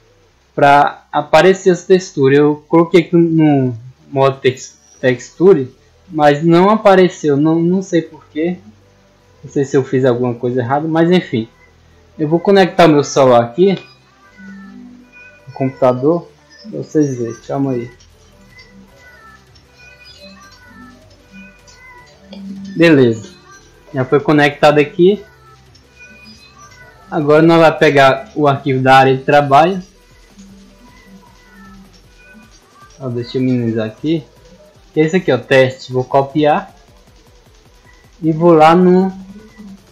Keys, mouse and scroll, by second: 4.8 click, 5.4 click, 7.2 click, 8.0 click, 9.0-9.5 scroll up 2, 9.9-10.4 scroll up 2, 11.1 scroll down 2, 26.3 click, 28.4 click, 30.3 click, 31.5 click, 32.9 click, 33.9 click, 35.1 click, 36.0 right click, 37.2 click, 38.6 click, 39.6 click.